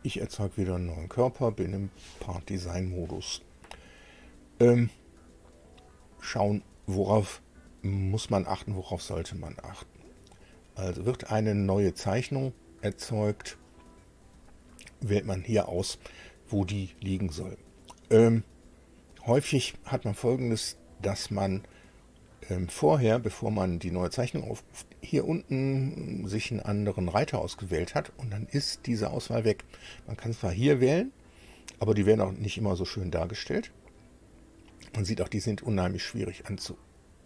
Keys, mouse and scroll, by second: 1.4 click, 13.1 click, 27.3 click.